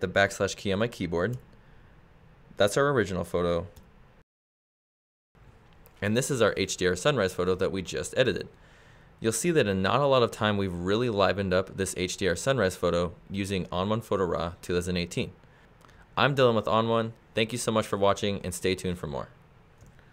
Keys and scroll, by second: 1.6 \, 4.1 \.